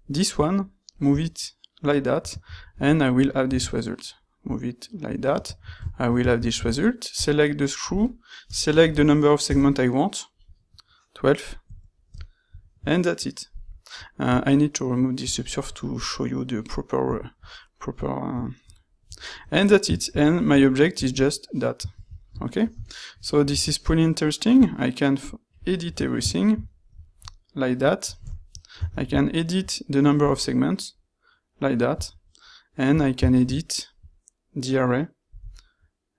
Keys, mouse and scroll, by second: 6.3 ctrl+shift+q, 7.4-8.8 middle drag, 20.0 shift+q, 28.9 ctrl+shift+q, 33.2 q.